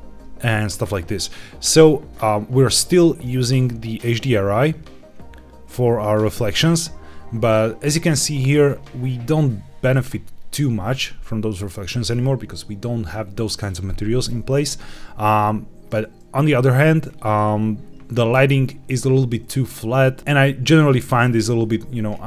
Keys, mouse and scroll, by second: 1.9-2.4 scroll up 1, 4.5 click, 20.9 shift+middle click, 21.4-22.2 scroll up 1.